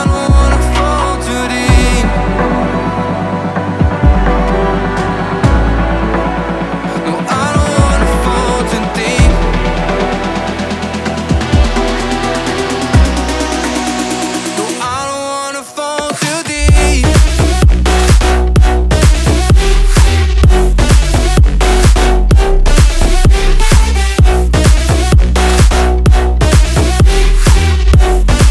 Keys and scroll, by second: 8.9 Return, 17.5 ctrl+i, 23.5 Escape, 24.6 ctrl+s, 27.6 b.